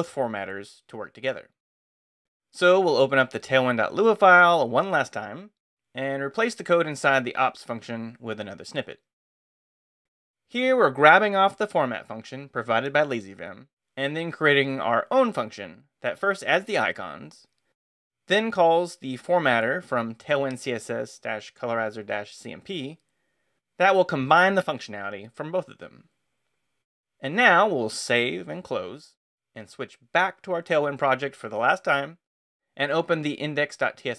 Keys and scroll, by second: 1.1 Return, 2.3-3.6 typing, 5.9-8.5 typing, 9.4 super+v, 27.6 Escape, 27.9-28.9 typing, 31.4 Return, 32.6-34.1 typing.